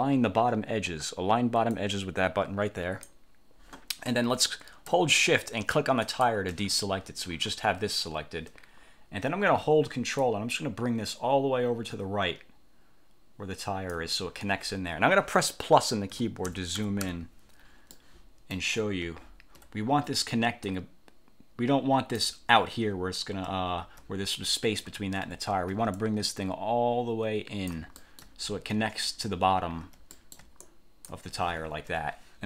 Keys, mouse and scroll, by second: 1.8-3.4 drag, 6.1 shift+click, 10.3-14.2 ctrl+drag, 16.2 =, 18.0 click, 19.4-19.7 ctrl+scroll up 2, 20.8-22.5 ctrl+drag, 23.8 ctrl+scroll up 1, 25.4-25.8 ctrl+scroll down 2, 26.1-28.0 ctrl+drag, 28.2 ctrl+middle click, 28.7 ctrl+scroll up 2, 30.2 ctrl+middle click, 30.5 ctrl+click, 30.8 ctrl+click, 32.0 1.